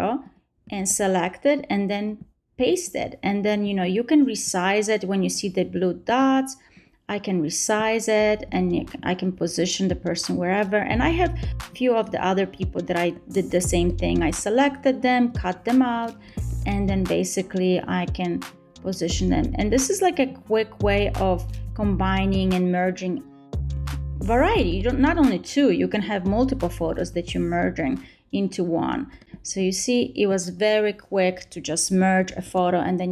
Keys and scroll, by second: 0.7 super+v, 12.6 super+a, 13.1 super+c, 14.6 super+v, 19.2 super+a, 19.8 super+c, 21.8 super+v, 22.6 super+v, 30.8 super+a, 31.7 super+c.